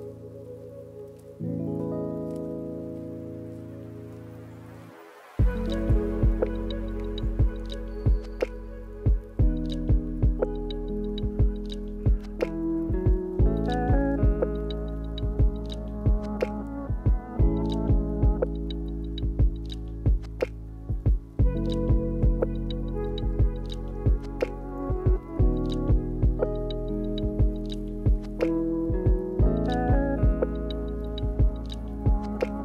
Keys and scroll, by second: 1.0 space, 3.5 space, 6.1 space, 7.0 space, 8.3 space, 11.5 space, 13.3 space, 13.7 space, 14.8 space, 16.1 space, 22.5 space, 23.2 space, 23.7 space, 26.0 space, 27.4 space, 28.8 space, 31.1 space.